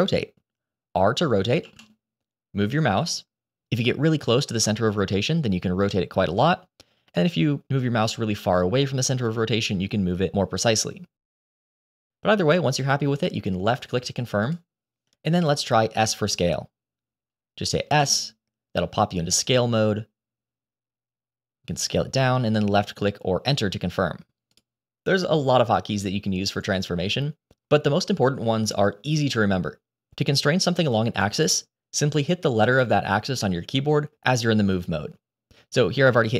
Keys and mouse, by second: 1.5 r, 17.9 s, 25.3 g.